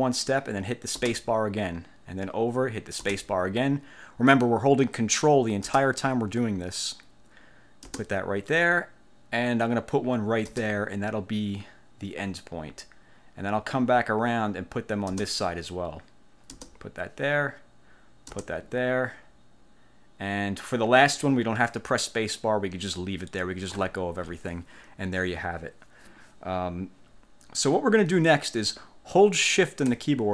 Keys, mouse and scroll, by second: 1.2 ctrl+space, 3.2 ctrl+space, 5.8 ctrl+space, 8.0 ctrl+space, 10.6 ctrl+space, 15.2 ctrl+space, 16.7 ctrl+space, 18.4 ctrl+space.